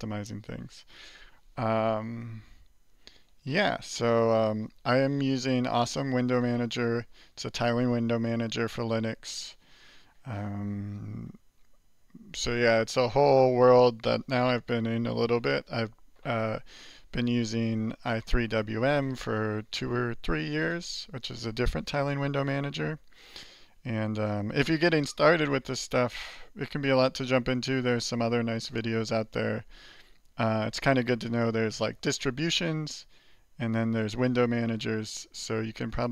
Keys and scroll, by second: 3.5 alt+q.